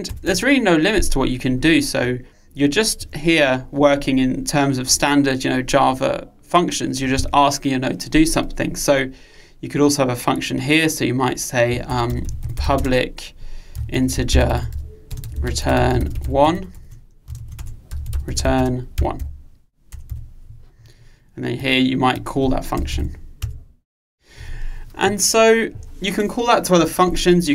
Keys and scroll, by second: 23.5 Return.